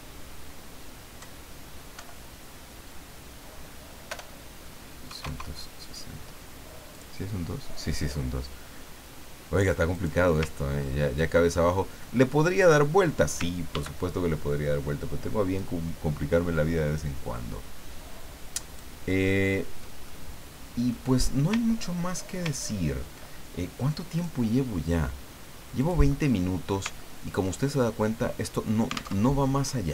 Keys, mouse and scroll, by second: 1.2 Right, 1.9 Delete, 4.1 BackSpace, 5.0 KP_6, 5.2 KP_0, 6.9 click, 9.9 click, 10.6 ctrl+scroll up 2, 11.7 middle click, 12.6 click, 13.7 ctrl+d, 15.6-19.0 ctrl+drag, 19.2-20.0 ctrl+scroll down 1, 20.0-21.2 ctrl+middle drag, 21.6 ctrl+scroll down 1, 22.5-22.9 ctrl+scroll up 1, 24.2 click, 25.8 click, 27.0 ctrl+scroll down 2, 28.1 click, 29.2 alt+Tab.